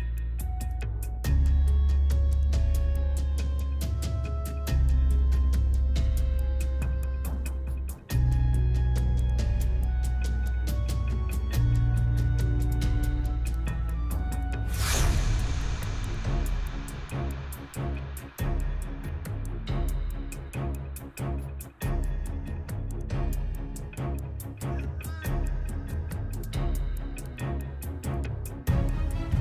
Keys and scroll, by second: 11.7 0, 12.0 Return, 13.6 1, 13.8 Return, 22.9 7, 23.5 shift+z.